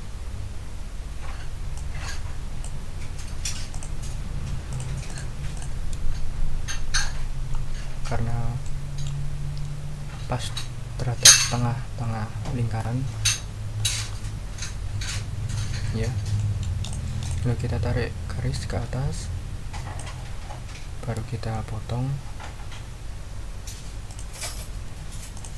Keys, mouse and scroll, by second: 1.7-2.8 drag, 3.7 click, 4.7 click, 5.0 click, 5.5 click, 6.4-6.9 ctrl+scroll up 4, 7.4 ctrl+scroll up 2, 8.6-9.2 ctrl+middle drag, 9.2-10.9 scroll up 1, 12.4-13.0 scroll up 2, 13.7-14.3 scroll up 2, 15.2-15.5 ctrl+scroll down 2, 15.7-16.1 ctrl+scroll down 2, 16.3 ctrl+click, 16.8 ctrl+click, 17.2 ctrl+click, 18.5 click, 18.7 middle click, 19.4 click, 24.1 shift+click, 25.3 click.